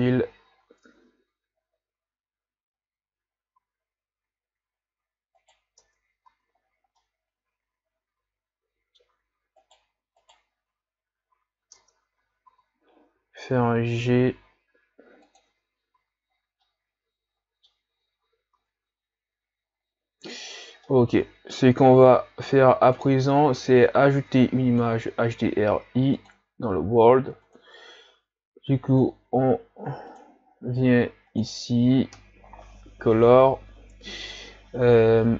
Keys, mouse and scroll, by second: 0.4 scroll up 7, 1.0-1.5 ctrl+scroll down 4, 1.7-2.3 scroll up 2, 2.7 scroll up 1, 3.6 s, 5.8 Tab, 6.3 a, 6.7-7.1 scroll down 3, 7.1-9.7 middle drag, 9.7 right click, 10.2 shift+right click, 11.8 Tab, 12.2 a, 12.5 a, 13.3 g, 15.5 Tab, 16.0 a, 16.4-16.8 scroll down 4, 16.8-20.6 middle drag, 20.6-21.0 scroll down 2, 21.0-29.6 middle drag, 29.6 click.